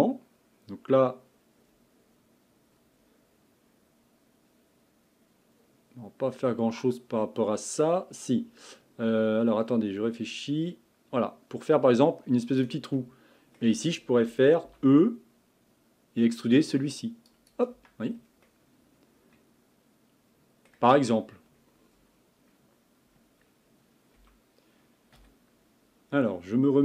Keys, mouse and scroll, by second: 10.2-13.0 drag, 13.0-15.1 middle drag, 15.1 e, 17.8 Tab, 18.1 scroll down 1, 18.5-20.8 middle drag, 20.8 scroll up 1, 20.9-24.1 scroll down 4, 24.2 b.